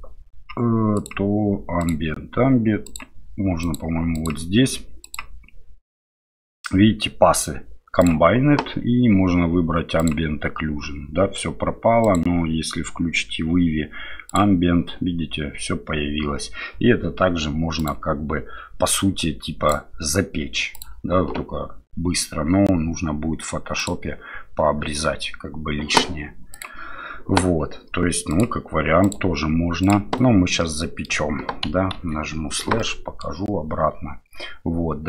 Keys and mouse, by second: 10.1 drag, 23.9 click, 28.3-30.6 drag, 30.6-31.1 middle drag, 32.8-33.2 middle drag.